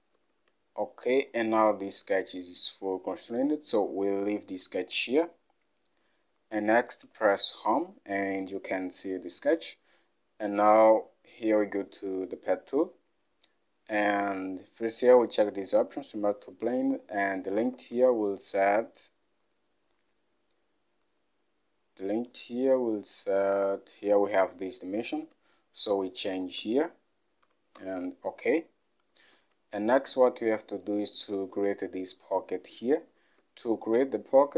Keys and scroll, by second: 7.2 Home, 17.8 alt+Tab, 25.2 alt+Tab, 26.4-27.5 typing, 27.8 Return, 29.4 alt+Tab.